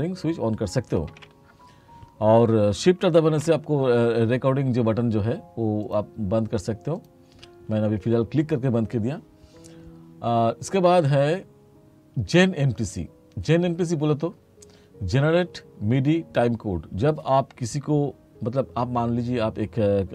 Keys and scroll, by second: 1.1 k, 3.4 shift+r.